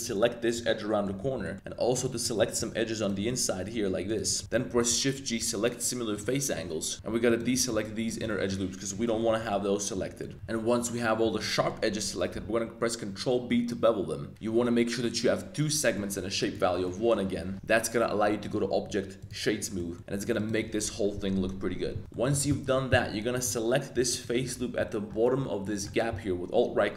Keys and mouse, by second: 0.7 middle click, 1.2 z, 1.4 middle click, 1.9 shift+middle click, 2.2 middle click, 3.0 shift+click, 3.2 middle click, 4.0 shift+click, 4.3 z, 4.4 z, 4.7 shift+g, 6.9 shift+super+z, 8.5 click, 9.0 shift+click, 9.1 middle click, 9.3 z, 9.5 middle click, 10.2 shift+click, 10.8 middle click, 10.8 z, 11.3 shift+click, 11.4 middle click, 11.5 middle click, 12.3 super+b, 16.0 click, 16.9 middle click, 16.9 z, 17.3 Tab, 18.4 right click, 19.8 middle drag, 20.3 click, 22.0 z, 22.1 Tab, 22.1 middle click, 22.5 shift+middle click, 22.9 middle click, 23.3 middle click, 24.1 alt+click, 24.4 z.